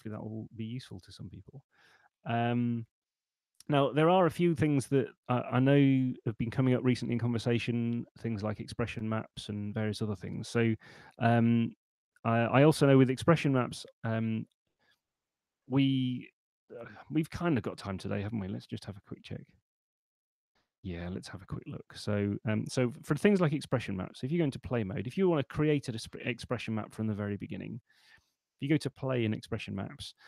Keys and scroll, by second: 23.3 super+4.